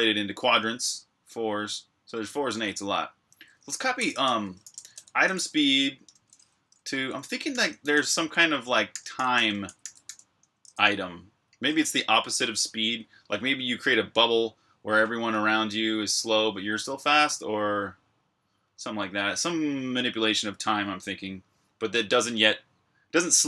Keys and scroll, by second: 3.6-6.0 typing, 6.6 Tab, 7.5-9.6 typing, 11.7-12.4 typing.